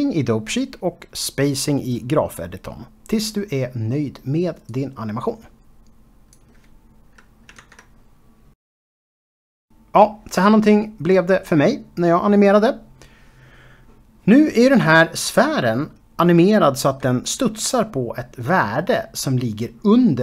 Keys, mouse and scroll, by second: 0.0-2.7 typing, 0.0 click, 0.1 click, 0.3 click, 0.5 click, 0.5 click, 0.8 click, 1.0 shift+middle click, 1.3 click, 1.6 click, 1.7 click, 2.1 click, 2.3 Tab, 2.4 middle click, 3.0 scroll up 6, 3.2 click, 3.3 click, 3.4 click, 3.5 click, 3.5 scroll up 1, 3.7 shift+right click, 4.0-7.4 typing, 4.1 Left, 4.4 Left, 4.6 Left, 4.6 Left, 4.8 click, 5.0 click, 5.1 Left, 5.8 click, 6.0 Escape, 6.1 click, 6.3 click, 6.8 Tab, 6.9 shift+middle click, 6.9 scroll up 2, 7.1 click, 7.3 click, 7.5 click, 7.6 scroll down 1, 7.7 click, 7.8 click, 8.0 scroll up 2, 8.0 shift+middle click, 8.2 click, 8.5 Home, 11.8 space.